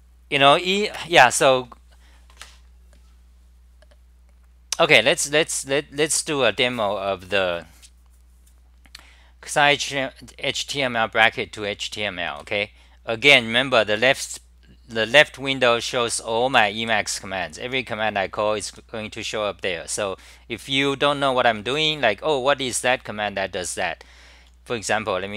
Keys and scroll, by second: 12.4 w, 16.6-18.7 typing, 21.5 s, 21.6 s.